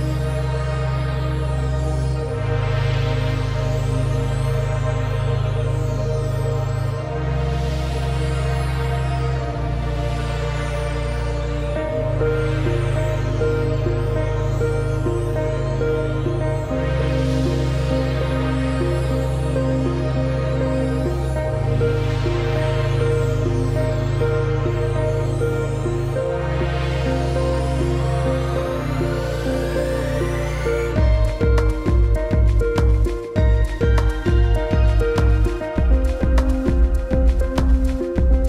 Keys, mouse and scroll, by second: 0.2 space, 0.8 scroll down 1, 0.9 space, 1.0 click, 1.3 space, 1.5 scroll up 1, 1.8 space, 4.6 click, 6.0 ctrl+z, 6.2 click, 6.4 space, 7.4 click, 8.8 space, 9.1 click, 9.8 ctrl+2, 10.2 click, 10.4 space, 10.5 click, 11.3-11.7 alt+scroll up 2, 11.7 click, 12.1 t, 13.6 click, 15.3 click, 15.9-17.3 typing, 18.2 shift+click, 20.5 click, 21.1-21.8 typing, 21.9 Return, 22.6 click, 28.0 click, 30.8 ctrl+c, 31.3 click, 31.6 v, 31.9 click, 32.7 ctrl+z, 33.1 ctrl+z, 33.6 click, 34.2 z, 34.6 click, 34.9 click, 37.2-38.4 scroll down 1.